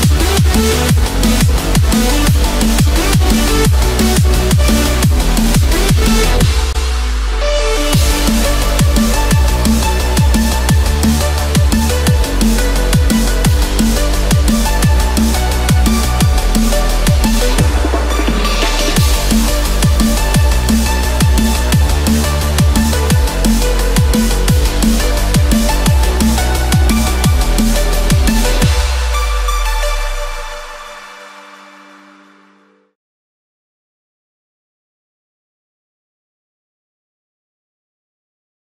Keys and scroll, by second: 0.2 ctrl+-, 4.6 ctrl+z, 6.6 ctrl+-, 11.4 ctrl+-, 11.7 ctrl+0, 16.7 Return, 22.4 ctrl+=.